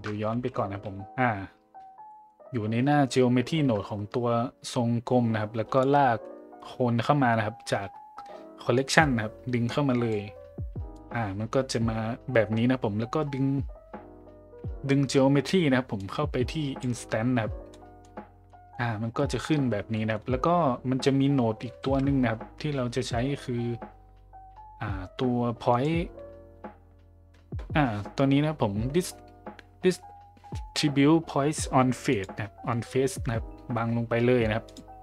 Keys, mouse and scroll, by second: 0.3 ctrl+z, 2.1 middle click, 8.7-10.1 drag, 10.9-11.7 drag, 16.0 click, 17.7-18.0 middle drag, 18.5 middle drag, 20.0 middle click, 21.8 shift+a.